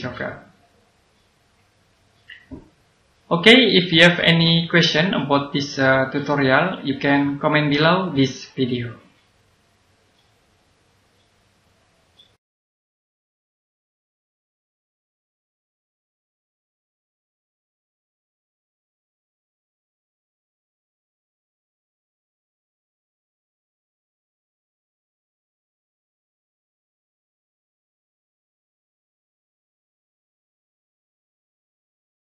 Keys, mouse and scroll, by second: 4.6 click.